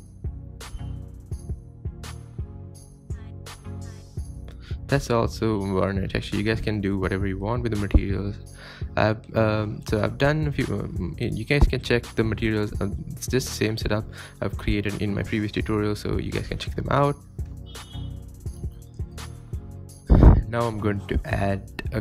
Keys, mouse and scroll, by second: 2.6 click, 4.9 Tab, 5.0 scroll down 3, 5.4 scroll up 1, 5.8 click, 6.1 click, 6.9 click, 8.4 scroll down 2, 9.4-9.9 drag, 10.2 click, 10.3 shift+a, 12.8 click, 12.9 Tab, 13.0 Tab, 13.1 scroll down 6, 13.3 space, 13.5 scroll up 3, 14.3 scroll up 2, 14.3 space, 15.1 click, 15.9 click, 16.5 click, 17.1 click, 17.2 scroll down 5, 17.4 space, 18.1-18.6 scroll up 4, 18.6 scroll down 1, 18.9 space, 19.1 drag, 20.4 scroll down 1, 20.8-21.6 shift+middle drag.